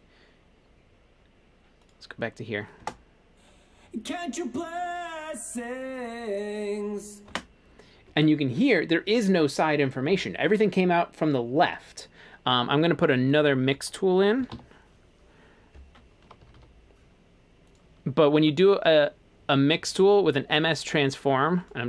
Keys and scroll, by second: 2.9 space, 7.3 space, 14.2-16.8 typing.